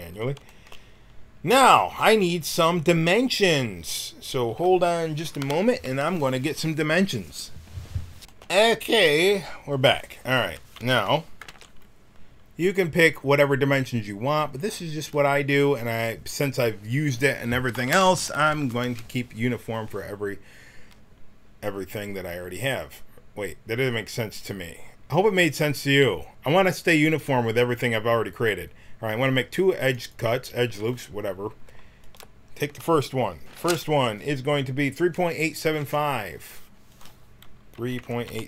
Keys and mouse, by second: 8.2 Tab, 11.5 ctrl+r, 32.0-38.4 drag.